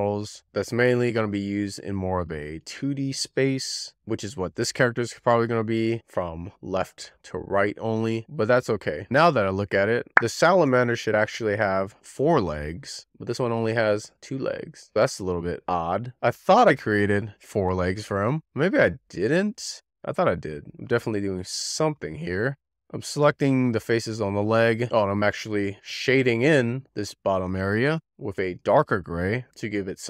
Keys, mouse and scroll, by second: 0.4-1.1 scroll up 4, 1.1-2.6 middle drag, 3.6 shift+middle click, 4.0-4.9 scroll down 6, 4.3 shift+middle click, 4.9-7.2 shift+middle drag, 7.4-7.9 scroll up 1, 7.9-9.7 shift+middle drag, 21.6-23.4 middle drag, 23.6 click, 24.2 middle click, 25.2 middle click, 25.5 ctrl+click, 25.8 middle click, 26.1 middle click, 26.4 shift+middle click, 26.5 shift+click, 26.6 scroll down 2, 26.7 scroll up 1, 27.0 middle click, 27.2 shift+click, 27.3 middle click, 27.6 middle click, 27.7 shift+middle click, 27.9 shift+click, 28.0 middle click, 28.1 scroll up 6, 28.3 scroll down 1, 28.8 click, 29.3-29.9 scroll down 2, 29.5 click, 29.7 middle click.